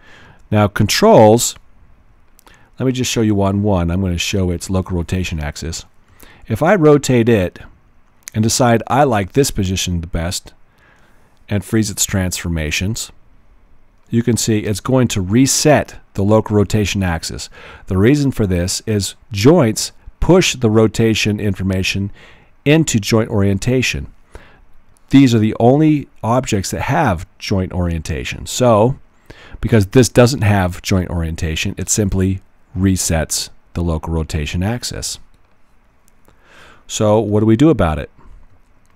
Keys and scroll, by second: 0.2 w, 1.3 w, 6.1 alt+e, 7.2 alt+e, 38.5 w.